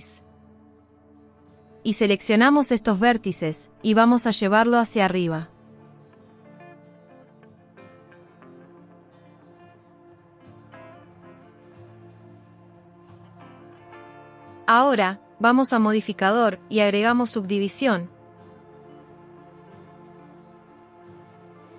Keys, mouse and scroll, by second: 1.5 click, 6.2 g, 7.2-9.3 middle drag, 12.9 click, 18.3-21.7 drag.